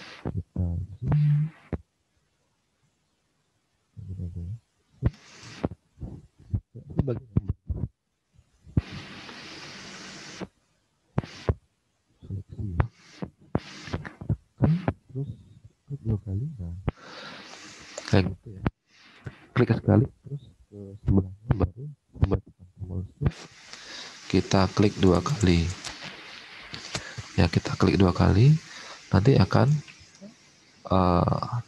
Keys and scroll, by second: 5.4 alt+Tab, 11.7 alt+Tab.